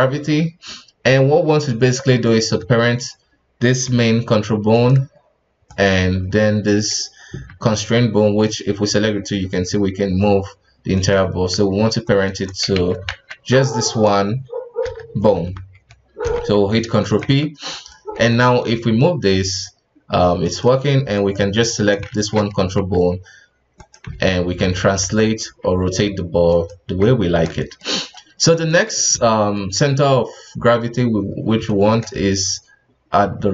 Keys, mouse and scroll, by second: 0.2-1.2 scroll up 2, 1.2-2.2 scroll down 2, 2.2 right click, 3.8 g, 5.7 shift+right click, 7.5 g, 12.0 shift+right click, 12.7 ctrl+z, 13.5 shift+right click, 14.8 n, 15.3 Tab, 16.2 ctrl+p, 17.2 Tab, 17.7 right click, 18.1 scroll down 2, 18.3 g, 21.1 right click, 21.5 right click, 22.1 shift+z, 22.8 g, 24.1 g, 25.4 r, 27.2-27.6 scroll up 2, 27.6 shift+middle click, 27.9-28.5 scroll up 2, 28.5 right click, 28.9-29.2 scroll down 2, 29.2-31.2 shift+middle drag, 31.2-31.6 scroll up 2, 31.6-33.5 shift+middle drag.